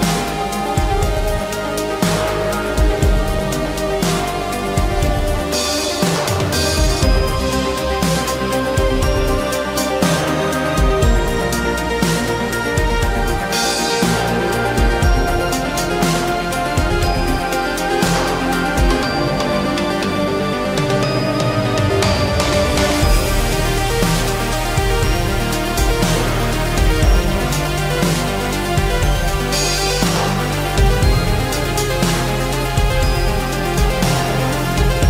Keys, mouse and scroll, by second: 1.1 shift+middle click, 2.2 space, 3.0 shift+click, 3.8 shift+middle click, 4.8 s, 11.3 shift+middle click, 11.7 space, 15.5 s, 18.4 shift+middle click, 20.6 shift+middle click, 21.3 typing, 24.8-25.1 typing, 25.4 Return, 27.3 shift+middle click, 28.9 m, 30.2 shift+middle click, 33.3 shift+scroll up 1, 33.4 shift+middle click.